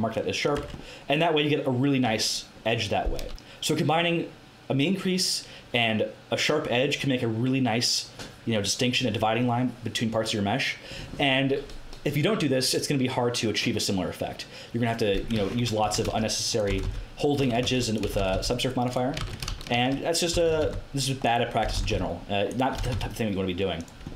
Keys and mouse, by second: 0.6 Tab, 15.3 Tab, 15.8 a, 16.0 ctrl+r, 16.6 g, 17.3 a, 17.6 ctrl+r, 18.0 g, 19.1 ctrl+z, 19.7 ctrl+z, 20.3 g, 21.6 g, 22.8 g.